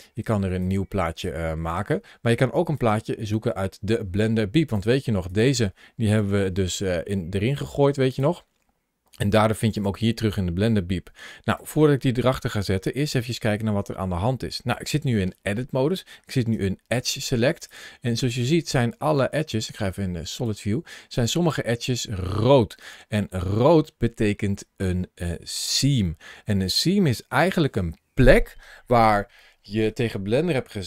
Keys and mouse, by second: 0.5-1.5 drag, 2.7 click, 5.1 click, 6.0 g, 9.7 click, 14.9 shift+middle click, 15.6 middle click, 16.3 2, 18.4 middle click, 19.0 middle click, 20.3 click, 21.0 click, 21.4-26.4 middle drag.